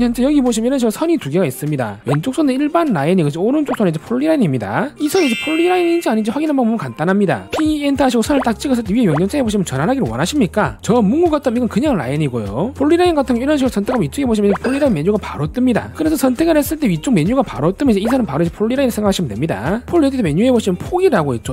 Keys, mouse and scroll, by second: 1.2 click, 1.5 click, 1.8 click, 2.0 click, 2.7 click, 3.4 click, 4.2 click, 4.6 click, 8.3 right click, 9.1 right click, 14.5 right click.